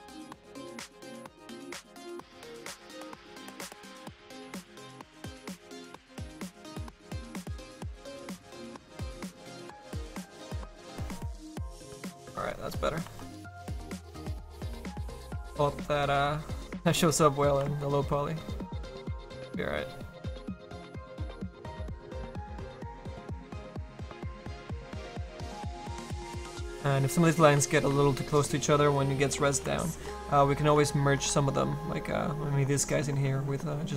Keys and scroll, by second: 2.8 s, 7.1 s, 7.5 s.